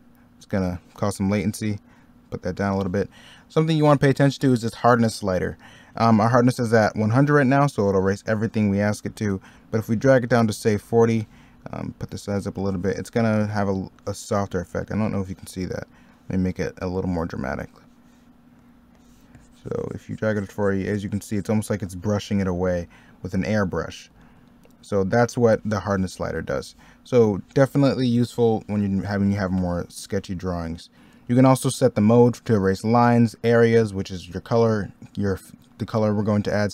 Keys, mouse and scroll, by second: 0.4 ctrl+z, 9.1 ctrl+z, 13.4 ctrl+z, 22.7 ctrl+z, 26.3 middle click, 29.8 ctrl+z, 30.4 middle click.